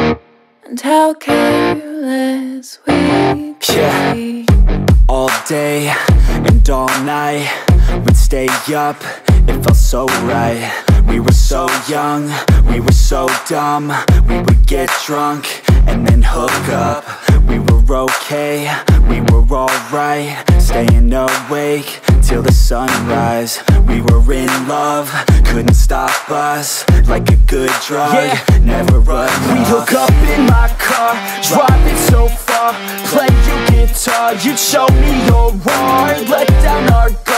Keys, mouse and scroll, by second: 6.6 click, 8.3 right click, 10.9 click, 14.1 click, 17.2 click, 23.6 click, 23.8 click, 24.5 right click, 25.6 click, 27.9 click, 31.3 click, 33.6 click, 36.2 click.